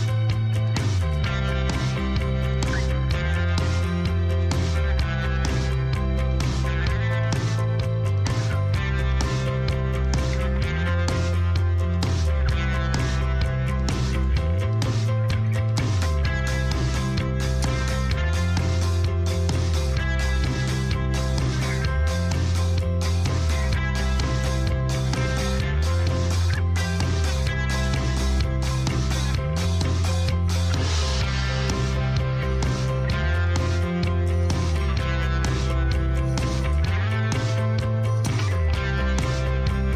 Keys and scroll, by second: 1.6 shift+z, 15.6 ctrl+r, 16.5 Return, 23.3 3, 24.7 x, 32.2 1, 34.5 1, 36.3 3, 37.1 shift+z.